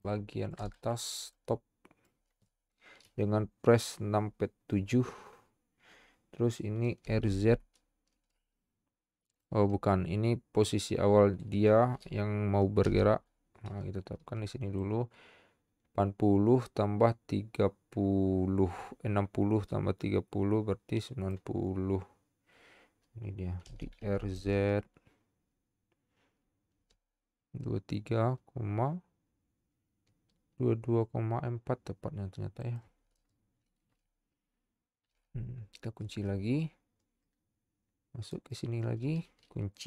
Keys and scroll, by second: 7.2 z, 13.0 i, 23.9 r, 24.1 z, 35.1 |.